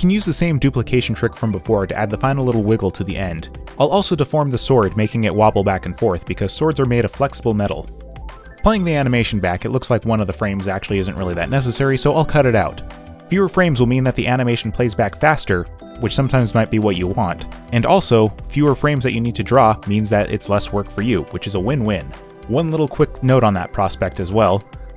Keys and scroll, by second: 3.8 space, 4.6 Return, 5.5 Return, 6.1 b, 6.4 z, 7.6 e, 8.1 b, 9.8 b.